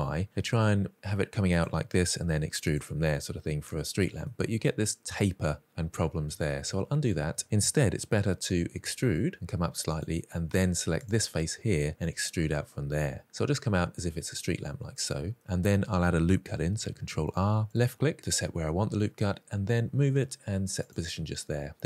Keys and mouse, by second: 1.4 click, 2.0 e, 2.5 click, 3.9 middle click, 5.2 middle click, 6.4 ctrl+z, 6.8 ctrl+z, 8.5 e, 9.9 click, 10.8 click, 12.0 e, 14.5 click, 14.8 middle click, 16.4 ctrl+r, 16.9 click, 20.5 click.